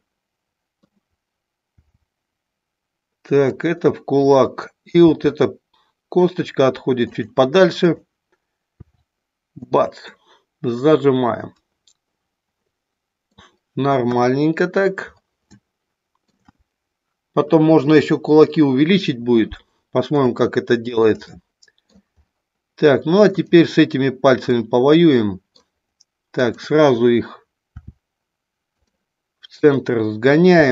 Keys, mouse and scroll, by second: 0.0 middle click, 1.7 r, 3.5 click, 4.9 r, 7.0 click, 7.8 click, 8.7 r, 10.0-13.4 middle drag, 14.0 KP_1, 15.6 shift+middle click, 20.4 shift+middle click, 21.3 middle click, 23.3 click, 24.4-25.5 middle drag, 27.7 r, 29.7 click.